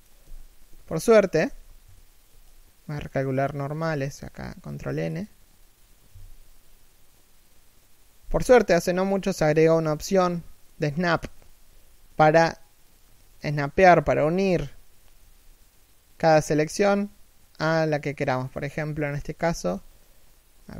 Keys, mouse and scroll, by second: 0.0 z, 0.7 middle click, 1.2 a, 1.9 ctrl+n, 4.4 ctrl+n, 12.6 right click, 12.9 middle click, 14.8 g.